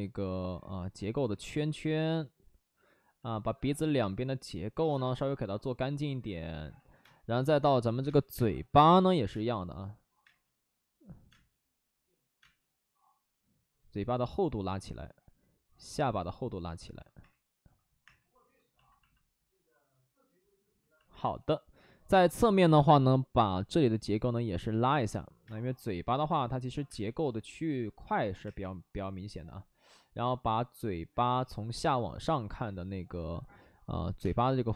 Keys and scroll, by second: 6.9-10.2 typing, 11.2 space, 17.1 3, 17.1 4, 17.9 3, 22.0 space, 22.4 1, 22.6 1, 23.0 1, 25.4 space, 26.8 space, 28.3 3, 34.1 space.